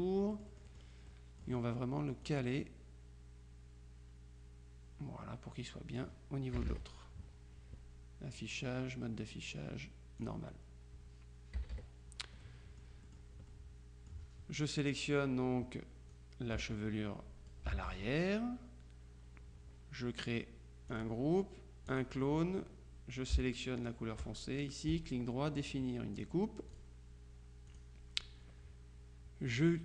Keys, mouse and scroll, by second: 0.6 middle click, 2.4-6.6 drag, 6.6 KP_Subtract, 8.4 click, 10.3 click, 11.6 KP_Subtract, 12.5-13.7 drag, 15.0 click, 16.2-18.1 drag, 17.8 ctrl+z, 21.0 click, 22.0 click, 23.9 shift+click, 25.0 right click, 26.2 click, 27.8 click.